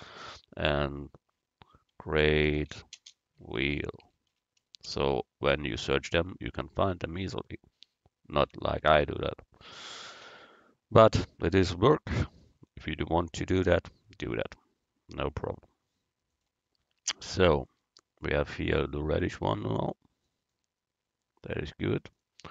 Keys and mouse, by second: 4.1 e, 8.5 Tab, 9.1 Tab, 10.3 z, 12.5 click, 13.2-14.4 drag, 16.4-18.1 drag, 22.2-22.5 right drag.